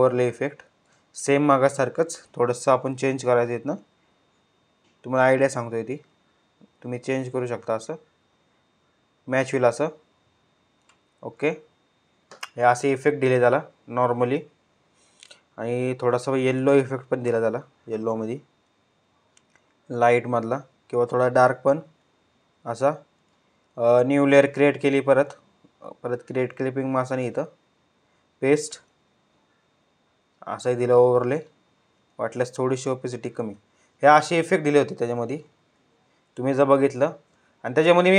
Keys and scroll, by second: 1.2 ctrl+u, 35.0 ctrl+z.